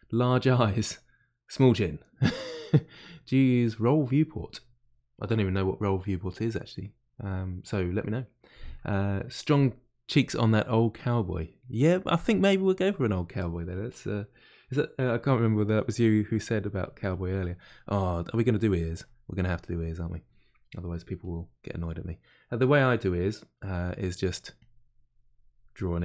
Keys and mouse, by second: 11.5-16.5 middle drag, 16.5-17.6 drag, 17.6-21.2 middle drag, 21.2 click, 21.7-23.7 middle drag, 23.7 f, 24.6-25.9 drag, 25.9-26.0 middle drag.